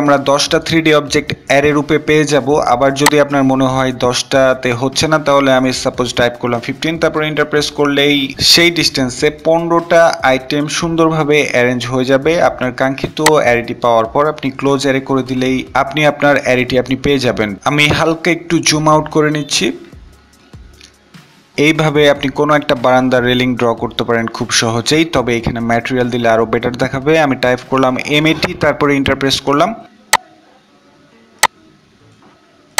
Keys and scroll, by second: 5.2 Return, 24.1 Return, 24.1-24.9 typing.